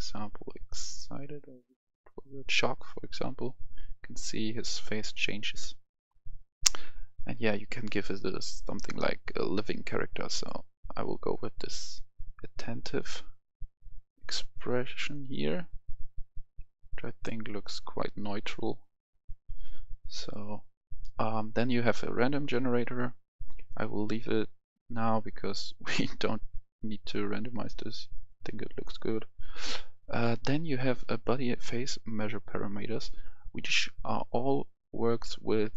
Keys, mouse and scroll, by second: 15.1 click, 25.9-26.4 scroll down 1, 26.4 scroll up 1, 26.5-27.1 scroll down 1, 27.1-28.8 scroll up 1, 28.8-31.1 drag, 31.1 click, 35.0 scroll down 1.